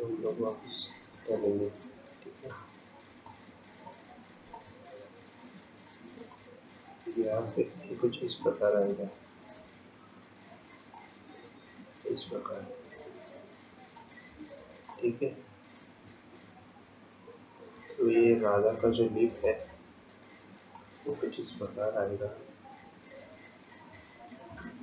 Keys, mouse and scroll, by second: 3.2 click, 4.6 ctrl+click, 6.3 ctrl+click, 15.2 ctrl+click, 19.8 ctrl+click, 21.2 ctrl+click.